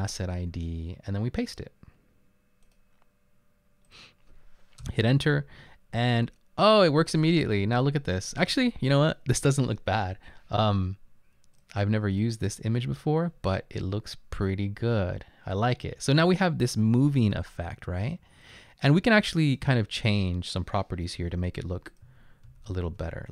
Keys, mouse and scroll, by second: 5.0 Return, 21.1-23.3 typing.